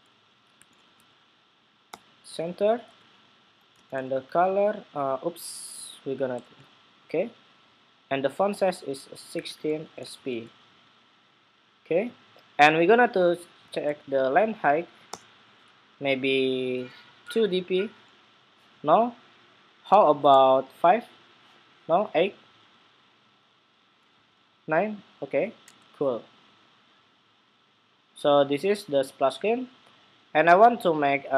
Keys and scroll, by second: 6.1 super+v.